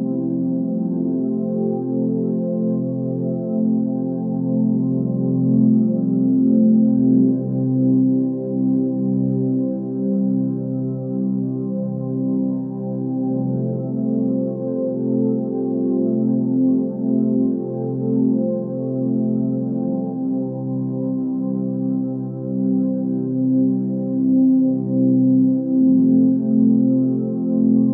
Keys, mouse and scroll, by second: 10.8 space, 11.2 click, 11.3-11.8 space, 12.0 click, 12.0-12.6 space, 13.2 click, 13.7 space, 14.1 ctrl+click, 19.9 space, 20.2 click, 20.4-22.0 space, 21.4 right click, 21.7 click, 21.8 space, 22.9 ctrl+click, 23.0 ctrl+click, 23.8-24.4 ctrl+drag, 25.5-25.8 click, 27.4 right click, 27.8 click.